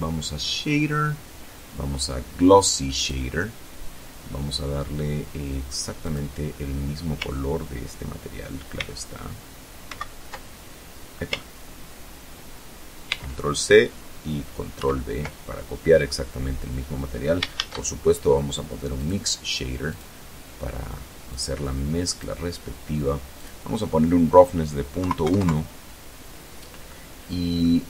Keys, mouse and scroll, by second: 2.1 click, 5.1 click, 7.9 ctrl+c, 8.9 ctrl+c, 12.2 ctrl+c, 13.9 ctrl+v, 16.7 shift+a, 18.0 click, 19.0 click, 20.4 click, 22.5 click, 24.0 KP_Decimal, 24.3 KP_1, 24.5 KP_Enter, 26.0 middle click.